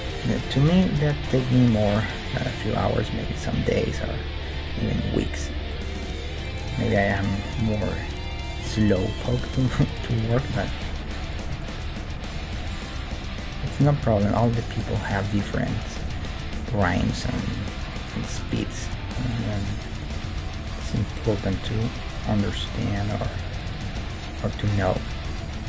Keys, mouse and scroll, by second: 0.6 g, 1.9 g, 3.6 g, 5.0 middle click, 5.4 Tab, 5.7-11.6 middle drag, 10.0 Tab, 10.2-14.4 right drag, 10.8 g, 11.9 g, 13.1 g, 14.2-17.2 middle drag, 16.2-18.0 right drag, 17.0 g, 18.0-22.5 middle drag, 18.5-21.4 right drag, 20.2 g, 22.5 g, 23.6-24.7 right drag, 23.9 g, 24.7-25.6 drag, 25.2 g.